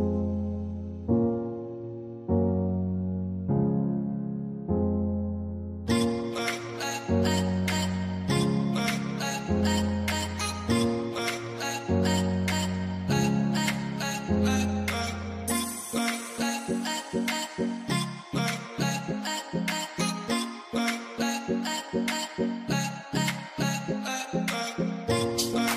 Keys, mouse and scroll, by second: 1.0 ctrl+0, 2.7 ctrl+0, 2.8 Tab, 3.6 ctrl+0, 5.0 Tab, 5.9 scroll down 1, 6.2 scroll up 1, 8.5 shift+click, 9.2 ctrl+g, 9.9 double click, 10.8 shift+b, 12.3 double click, 13.3-13.8 alt+scroll down 1, 14.6 ctrl+l, 18.4 ctrl+scroll up 1, 24.7 ctrl+0, 25.2 alt+scroll, 25.3 alt+scroll up 5.